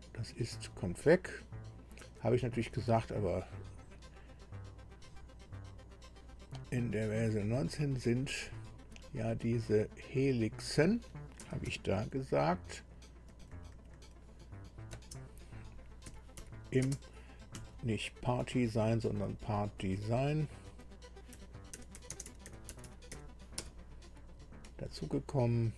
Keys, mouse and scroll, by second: 0.2 click, 2.0 Delete, 2.2 Delete, 2.7 Delete, 4.6 click, 7.1 click, 7.8 click, 10.0 click, 11.4 e, 12.2 n, 13.3 Delete, 13.5 Delete, 13.8 Delete, 13.9 Delete, 15.0 space, 16.0 i, 16.4 m, 16.9 space, 17.5 Right, 18.4 Delete, 18.8 Delete, 18.9 Delete, 19.2 Delete, 19.3 Delete, 19.4 Delete, 20.7 Delete, 21.1-24.1 typing, 24.6 Right.